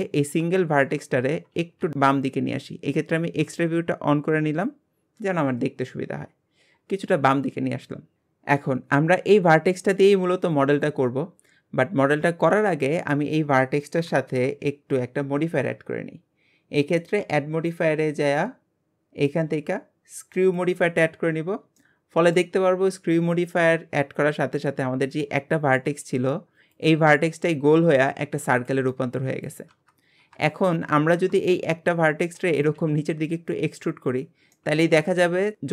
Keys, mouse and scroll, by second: 0.5-1.5 shift+middle drag, 1.5 alt+z, 2.1 click, 7.3-8.1 scroll up 1, 12.6-13.3 middle drag, 13.3 scroll down 1, 14.0 KP_Decimal, 14.4 KP_Divide, 20.6 click, 21.1-21.8 scroll down 5, 21.8-29.7 shift+middle drag, 30.1-30.5 scroll down 1, 30.5 shift+middle click, 30.9 scroll up 2, 31.2 Tab, 34.6-35.7 middle drag.